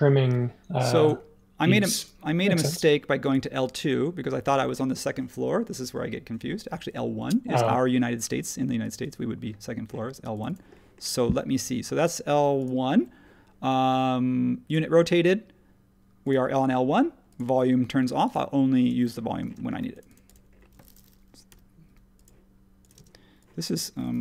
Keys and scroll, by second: 19.4 space, 22.9 space.